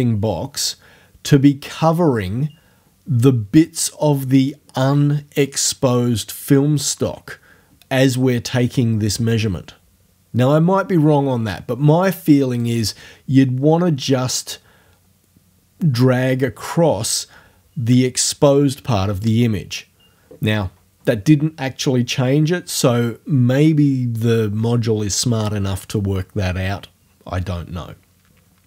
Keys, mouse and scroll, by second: 12.6-19.5 drag, 19.5-22.4 scroll up 1.